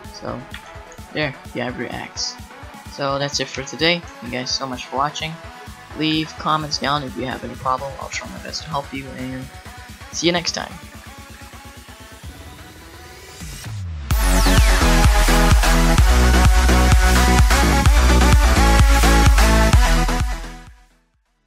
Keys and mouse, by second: 0.5 r, 2.8 alt+g, 3.5 KP_Decimal, 4.2 shift+s, 6.1 a, 10.9 a, 11.4 ctrl+s.